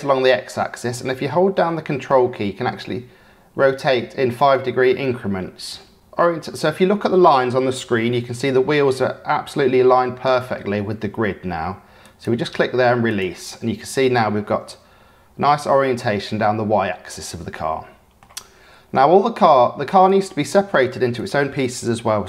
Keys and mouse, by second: 13.1 click, 14.6-15.5 middle drag, 17.5-18.2 middle drag, 20.1-21.2 drag.